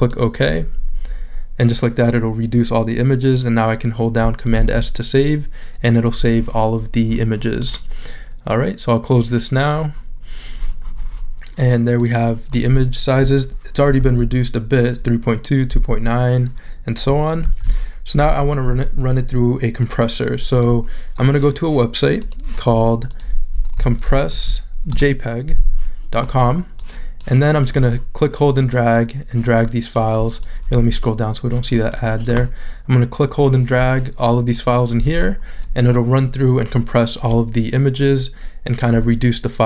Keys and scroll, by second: 4.5 super+s, 14.0 shift+super+z, 17.4 shift+super+z, 23.8 c, 24.3 o, 24.9 Return.